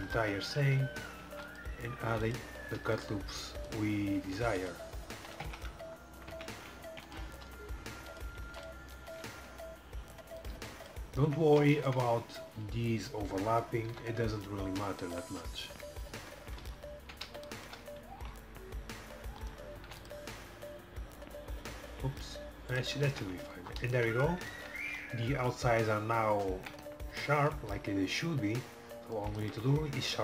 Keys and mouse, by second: 0.6 Tab, 1.4 ctrl+r, 2.9 ctrl+r, 4.4 ctrl+r, 5.5 Tab, 5.8 middle click, 6.4 Tab, 7.0 ctrl+r, 8.5 ctrl+r, 13.6 KP_5, 14.0 KP_5, 15.8 KP_7, 18.2 ctrl+r, 19.9 ctrl+r, 23.2 Tab, 23.4 middle click, 28.7 middle click.